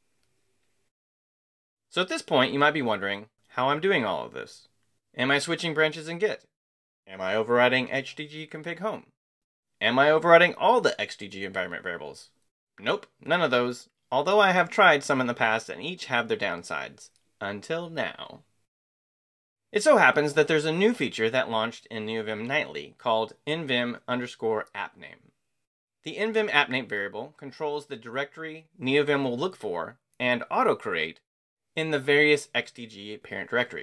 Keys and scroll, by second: 3.0 Escape, 3.2-4.1 typing.